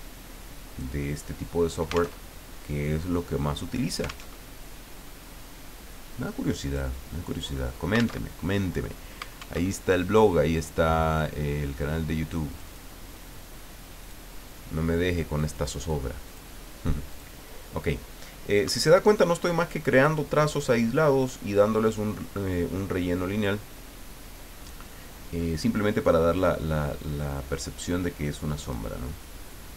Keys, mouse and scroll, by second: 2.2 alt+Tab, 4.3 alt+Tab, 6.6 click, 8.2 alt+Tab, 9.6 alt+Tab, 10.3 click, 11.8 click, 14.0 click, 15.1 click, 16.2 click, 17.1 click, 19.9 click, 21.8 click, 26.3 click, 28.6 click.